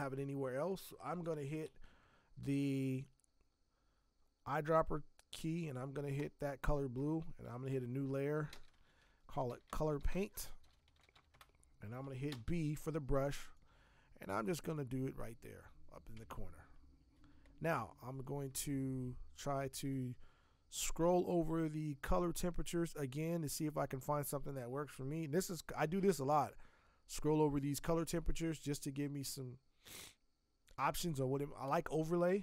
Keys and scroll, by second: 1.0 i, 8.5 ctrl+shift+n, 9.2-12.3 typing, 16.1 Tab.